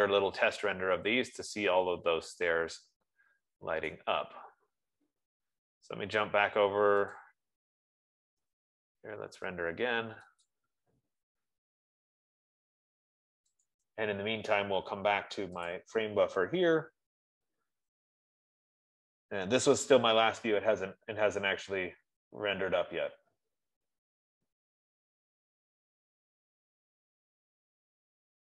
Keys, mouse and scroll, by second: 4.5 right click, 7.7 click, 11.2 click, 14.1 click, 16.3 click, 21.6-22.4 scroll, 26.5 middle click.